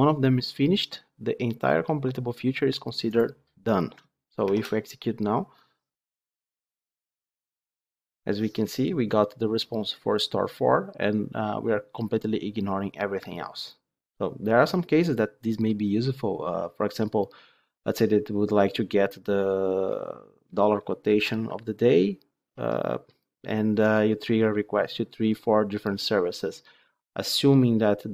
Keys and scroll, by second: 4.4 ctrl+shift+F10.